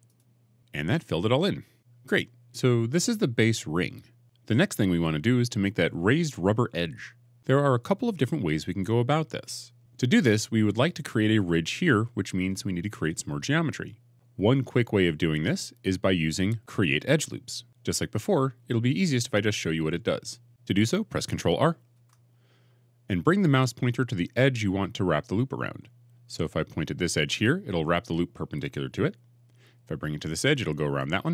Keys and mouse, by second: 1.7-5.0 middle drag, 21.8 ctrl+r.